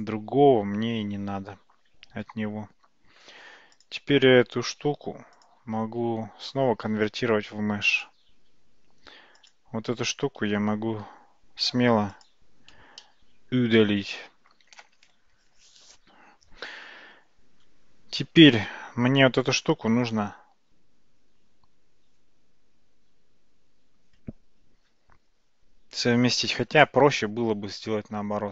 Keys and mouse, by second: 5.5-8.1 drag, 9.4 click, 10.5 x, 13.1-14.6 middle drag, 27.8 ctrl+z, 28.1 ctrl+z.